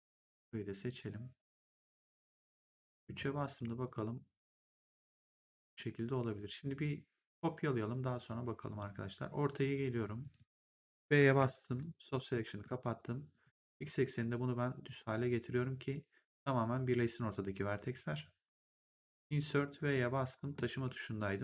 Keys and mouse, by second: 1.0 click, 2.9 3, 3.3 right click, 3.8 click, 5.6 click, 7.9 ctrl+1, 9.4 right click, 10.1 click, 12.4 r, 13.3 click, 14.0 w, 14.8 click, 16.7 right click, 18.9 Insert, 19.5 v, 19.8 middle click, 20.6 w.